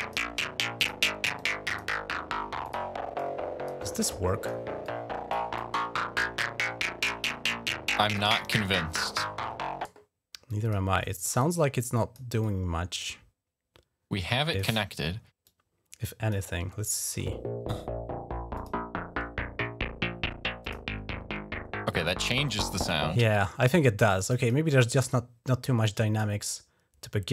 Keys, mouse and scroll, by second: 0.6 click, 1.2 click, 1.5 click, 2.4 click, 3.0 click, 3.9 click, 4.6 click, 5.4-7.1 drag, 7.8 click, 8.2 click, 10.3 click, 11.2 right click, 11.7 click, 11.9 right click, 12.2 click, 12.8 right click, 14.3 click, 15.2 click, 18.3 click, 20.4 click, 22.2 click, 23.9 click, 25.6 click, 26.0 right click.